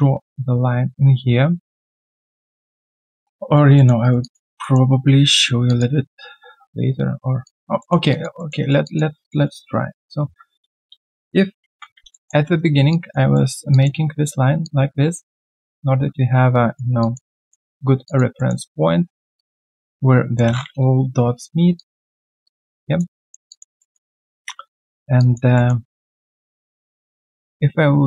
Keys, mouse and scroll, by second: 2.4 alt+middle click, 2.6 alt+click, 2.7 alt+middle click, 3.4 alt+right click, 3.7 alt+middle click, 4.0 alt+right click, 4.2 alt+click, 4.6 alt+middle click, 5.1 right click, 7.4 alt+click, 7.7 alt+middle click, 8.1 alt+click, 8.3 alt+middle click, 8.6 alt+right click, 8.8 alt+click, 10.1 alt+click, 11.6 ctrl+shift+x, 12.1 alt+middle click, 13.3 alt+middle click, 17.0 alt+click, 17.3 alt+middle click, 18.0 alt+click, 18.4 alt+middle click, 18.6 alt+right click, 20.8 Return, 21.2 scroll down 1, 21.7 alt+click, 22.1 alt+middle click, 22.4 alt+click, 23.1 alt+middle click, 23.5 alt+click, 23.8 alt+middle click, 24.1 alt+right click, 25.5 alt+middle click, 25.8 alt+right click.